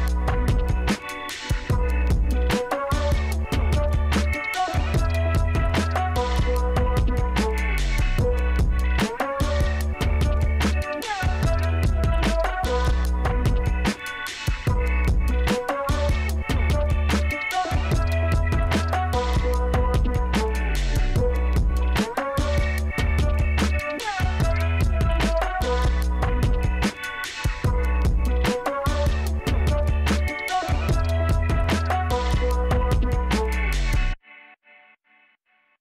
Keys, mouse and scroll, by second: 1.8 click, 4.2 click, 5.4 click, 13.2 click, 19.9 click, 23.1 click, 24.9 click, 28.8 click, 30.2 click, 31.4 click, 34.0 click.